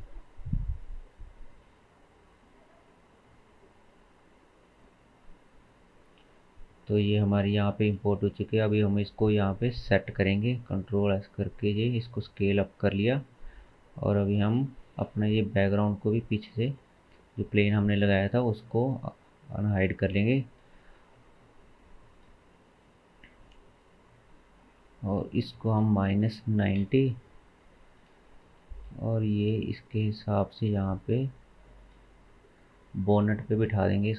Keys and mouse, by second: 5.6 click, 6.3 click, 7.7 shift+s, 10.5 s, 12.2 s, 14.4 alt+h, 14.9 drag, 16.6 KP_1, 19.5 click, 20.7 g, 22.7-24.8 shift+middle drag, 23.3 r, 24.8-32.3 drag, 28.9 g, 32.3-34.1 middle drag.